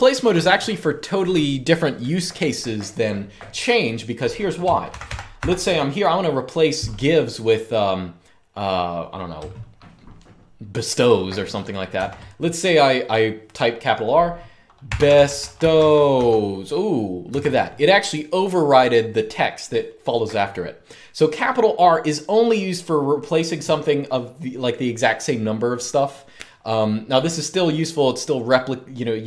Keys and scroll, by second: 4.6-5.1 typing, 11.7 typing, 14.3-16.4 typing, 17.1 Escape.